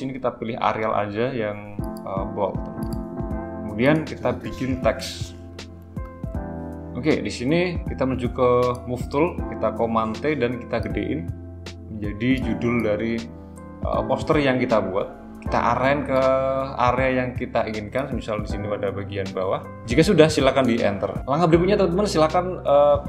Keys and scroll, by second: 9.8 super+t.